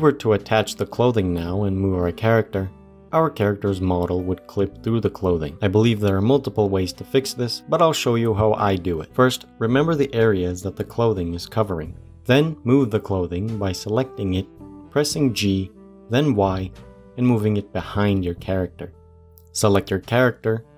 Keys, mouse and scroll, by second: 3.4-4.5 middle drag, 4.5-4.9 scroll up 1, 4.9-7.6 shift+middle drag, 9.1 ctrl+z, 9.2 ctrl+z, 9.4 ctrl+z, 9.6 ctrl+z, 9.9 ctrl+z, 10.1 ctrl+z, 10.3 ctrl+z, 10.5 ctrl+z, 10.7 ctrl+z, 11.5-13.8 middle drag, 13.8 click, 14.5 g, 18.3 click, 18.7-20.2 middle drag, 20.2 Tab.